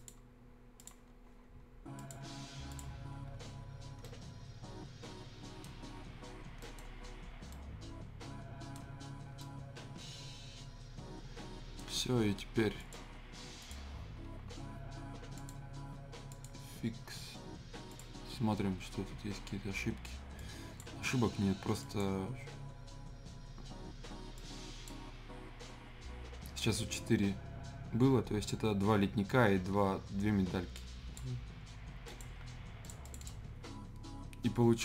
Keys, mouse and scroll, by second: 3.0 scroll down 1, 3.3 scroll up 1, 4.0-5.7 right drag, 5.7 scroll down 1, 6.1 scroll up 1, 6.6 right click, 6.8 scroll down 1, 7.0 scroll up 1, 7.5 right click, 8.8 scroll down 1, 9.2 scroll up 1, 9.4-12.8 right drag, 12.8 click, 20.3-21.8 drag, 24.3-27.3 drag, 30.7-32.0 drag.